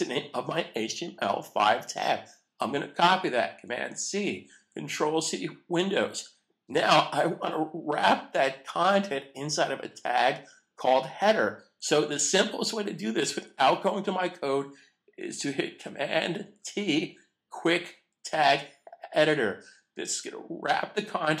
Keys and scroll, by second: 4.0 super+c, 16.6 super+t.